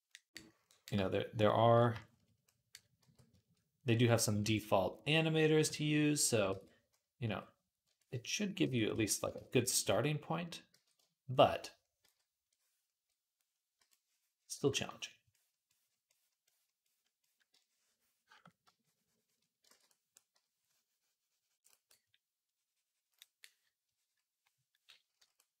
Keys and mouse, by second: 2.9 v, 4.3 alt+q, 5.4 i, 6.3 ctrl+z, 7.1 x, 8.7 d, 9.2 ctrl+z, 10.6 ctrl+z, 11.9 ctrl+z, 13.6 i, 14.5 ctrl+z, 19.6 ctrl+z, 20.1 p, 22.1-25.6 middle drag.